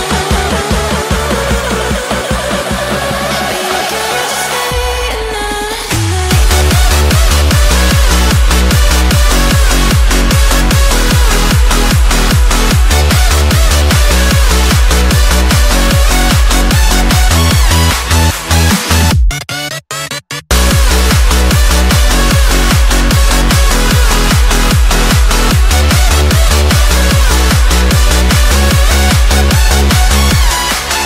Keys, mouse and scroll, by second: 0.6 Tab, 1.1 middle click, 1.9 alt+z, 2.2 click, 3.8 shift+click, 4.2 shift+click, 5.2 g, 6.6 Tab, 6.9-7.5 middle drag, 7.5 alt+z, 7.9-8.7 middle drag, 8.7 KP_1, 9.1 click, 9.6-10.0 shift+middle drag, 10.0 click, 10.3-11.0 middle drag, 11.0 scroll down 1, 11.5 KP_1, 12.4-12.8 shift+middle drag, 12.8 shift+a, 14.9-16.4 drag, 16.8-18.0 shift+middle drag, 18.0 s, 19.5-20.6 shift+middle drag, 20.6 g, 22.9-24.1 middle drag, 24.1 Tab, 24.6 shift+middle click, 25.1 f, 25.6 middle click, 26.5 KP_1, 26.9-29.3 shift+middle drag, 29.3 e.